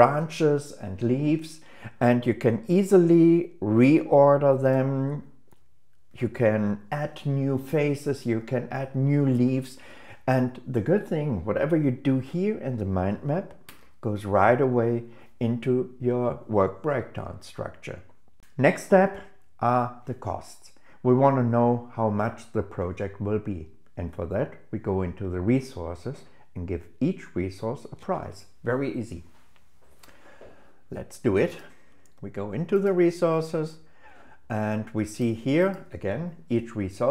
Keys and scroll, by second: 14.0 super+1.